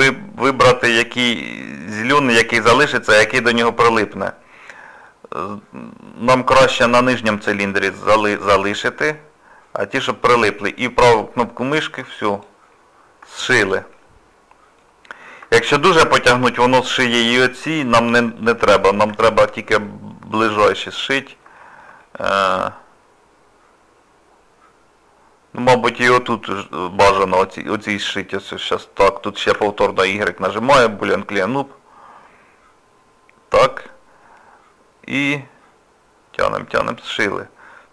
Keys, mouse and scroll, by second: 12.7 scroll down 2, 13.3 shift+middle click, 14.0 middle click, 15.1 scroll up 1, 15.4 scroll down 1, 15.7 shift+middle click, 16.3 scroll up 1, 16.4 scroll down 1, 16.8 middle click, 17.8 shift+middle click, 19.3 shift+middle click, 19.9 middle click, 21.6 shift+middle click, 22.0 middle click, 26.4-27.5 scroll up 2, 27.5 middle click, 29.6 y, 37.4 scroll down 2, 37.8 middle click.